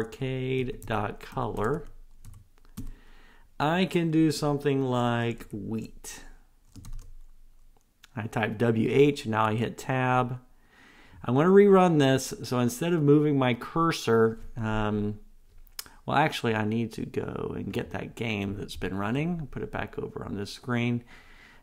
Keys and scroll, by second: 0.2 Tab, 9.7 Tab.